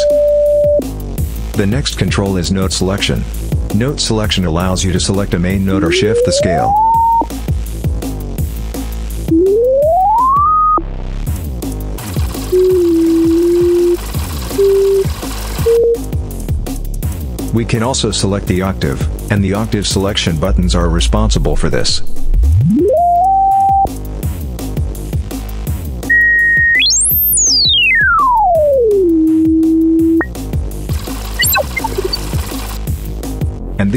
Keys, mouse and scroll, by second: 4.5 click, 5.4-7.2 drag, 8.1 click, 9.0-10.7 drag, 11.5 click, 14.1 click, 14.5 click, 15.3 click, 15.6 click, 17.9-19.1 drag, 20.2-23.8 drag, 24.6 click, 25.9-30.1 drag, 31.0 click, 31.1 click, 31.3 click, 31.7 click, 32.1 click, 32.7 click, 32.9 click.